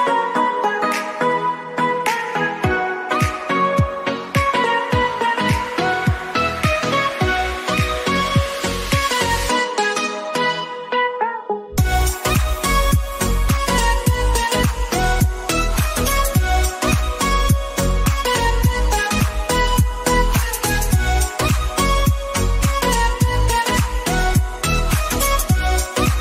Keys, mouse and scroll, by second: 3.2 click, 5.8-23.5 drag.